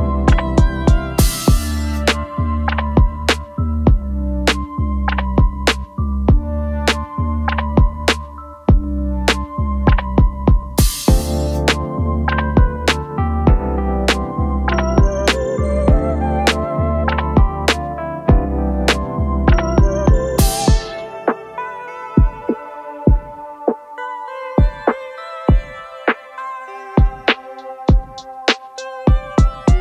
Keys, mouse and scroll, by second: 5.5 alt+scroll up 2, 15.4-15.7 alt+scroll down 1, 16.1-16.8 space, 18.6 alt+scroll up 1, 27.2 0, 27.7 8.